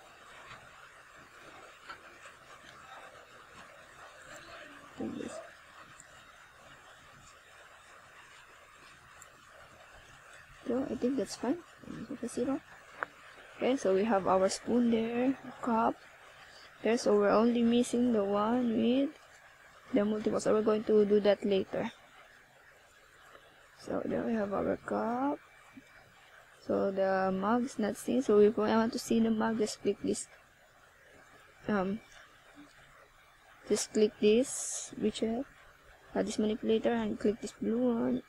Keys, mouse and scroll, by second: 1.2-1.5 scroll down 1, 3.2 click, 5.6 click, 13.2 click, 14.8 0, 21.9 click, 22.3 click, 25.5 click, 26.4 click, 27.5 middle click, 29.7 right click, 31.0 right click, 32.3 scroll up 1, 33.0 click, 37.4 BackSpace, 37.6 BackSpace.